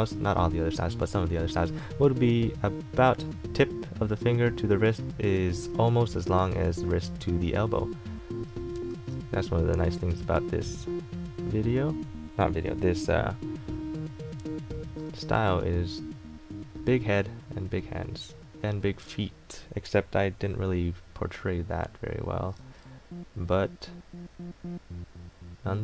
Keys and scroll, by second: 9.1 ctrl+z, 15.2 ctrl+z.